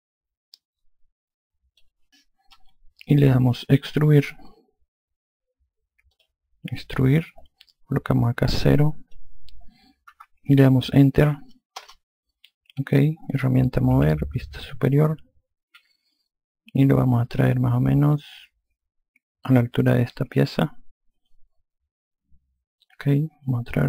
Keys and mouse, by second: 6.2 click, 8.8 click, 10.2 KP_0, 11.9 Return, 14.0 e, 15.7 F2.